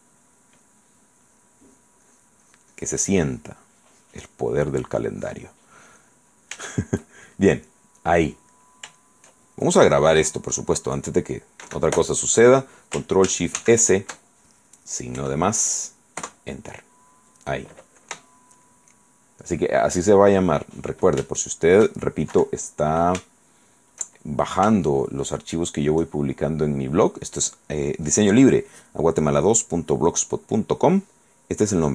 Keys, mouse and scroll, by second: 1.4 click, 2.2-5.8 drag, 5.9 click, 6.5-7.5 shift+middle drag, 7.5 shift+right click, 7.9-9.6 shift+middle drag, 13.2-14.3 ctrl+scroll up 3, 13.8 ctrl+shift+s, 15.4 KP_Add, 16.4 KP_Enter, 20.6 click, 21.4 shift+click, 22.5 KP_1, 23.5 shift+middle click, 23.5 shift+click, 24.9 shift+middle click.